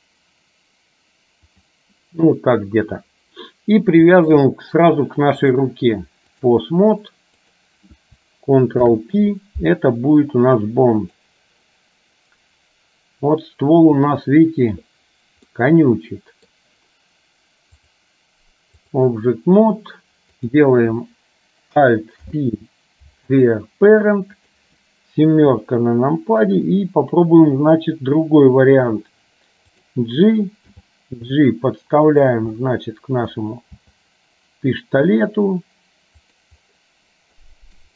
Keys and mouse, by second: 4.3 shift+click, 5.7-6.8 drag, 7.6 click, 8.9 ctrl+p, 15.7-16.7 middle drag, 17.9-19.2 drag, 20.4 click, 22.3 alt+p, 24.4 click, 25.6 KP_7, 27.6 r, 30.9 g, 32.7 middle click, 37.6-37.9 middle drag.